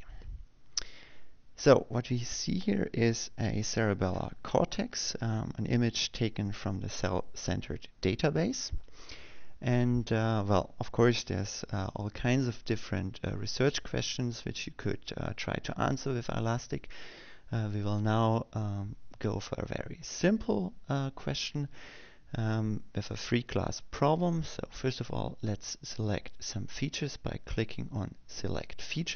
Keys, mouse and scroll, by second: 21.1 click.